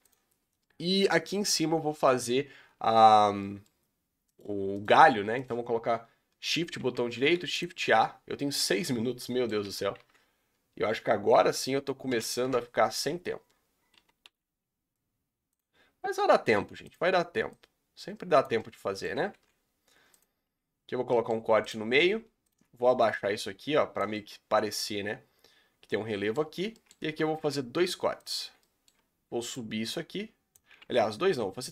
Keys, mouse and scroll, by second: 0.1 ctrl+a, 0.4 scroll down 3, 0.7-1.9 middle drag, 1.9 scroll up 2, 2.7 Tab, 3.4-4.3 middle drag, 4.3 shift+right click, 4.8 shift+right click, 5.4 shift+right click, 7.6 shift+a, 8.5 KP_Decimal, 9.2 middle click, 9.7 g, 13.4 scroll down 1, 14.0 s, 16.5 2, 16.9 drag, 17.6 click, 18.6 middle click, 19.3 ctrl+r, 21.1 middle click, 21.6 click, 24.1-26.4 middle drag, 26.4-27.4 scroll up 3, 26.8 shift+middle click, 27.4 ctrl+r, 28.7 middle click, 29.6 click, 30.8 ctrl+z, 31.2 ctrl+z.